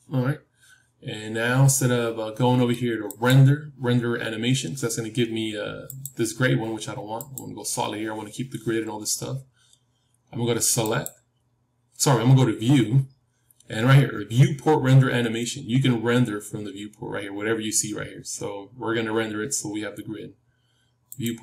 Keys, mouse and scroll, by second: 5.8-21.2 drag.